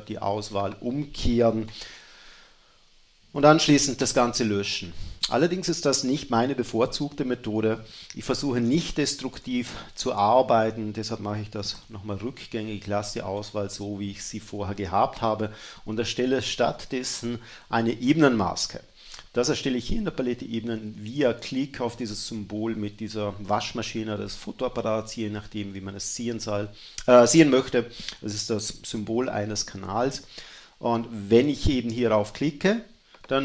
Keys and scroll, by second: 2.1 shift+super+i, 4.0 BackSpace, 7.7 super+z.